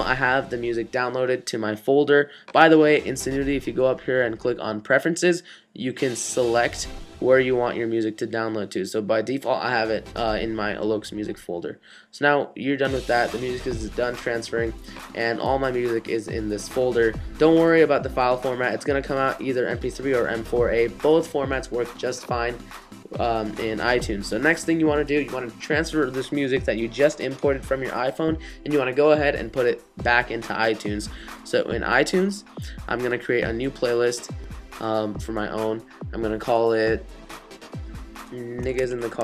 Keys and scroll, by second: 38.5-39.2 typing.